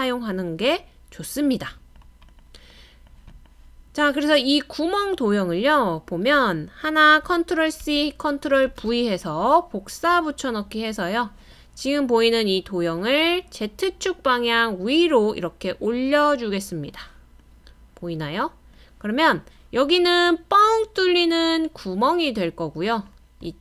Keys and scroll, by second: 7.8 super+c, 8.7 super+v.